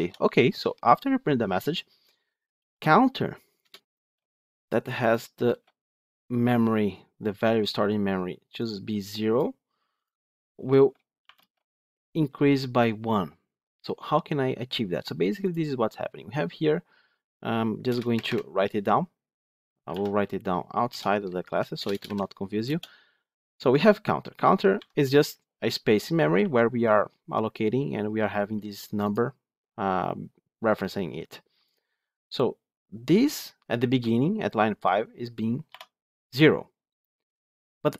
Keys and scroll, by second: 3.5 Return, 19.8 ctrl+x, 21.9 ctrl+v.